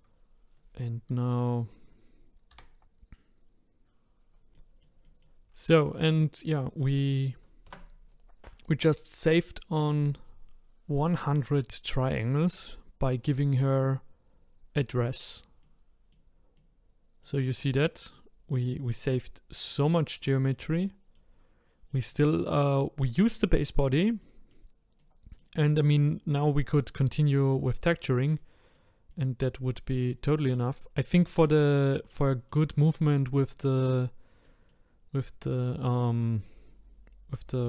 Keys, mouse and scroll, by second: 0.5-1.5 scroll down 1, 1.5-2.5 scroll down 1, 2.5 e, 4.3 click, 4.5-6.6 middle drag, 6.6 click, 7.6 Tab, 12.6-13.1 scroll up 4, 13.1-14.2 scroll down 1, 14.2-15.6 scroll down 3, 15.6-23.7 middle drag, 23.7-24.2 scroll down 1, 24.2-27.3 middle drag, 27.3-28.3 scroll down 1, 28.3-30.1 middle drag, 30.1-30.9 scroll up 4, 30.9-31.2 scroll down 1, 31.2-37.4 middle drag.